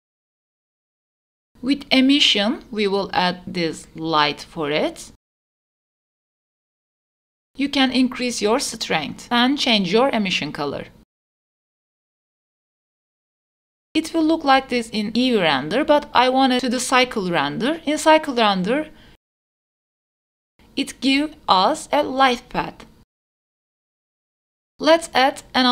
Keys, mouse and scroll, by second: 1.6-3.1 drag, 4.3-6.2 drag, 6.9 Tab, 7.4 click, 9.5 click, 11.9 click, 13.1 click, 13.5 x, 16.4 click, 16.8-18.2 drag, 24.9 click, 25.2-25.7 middle drag.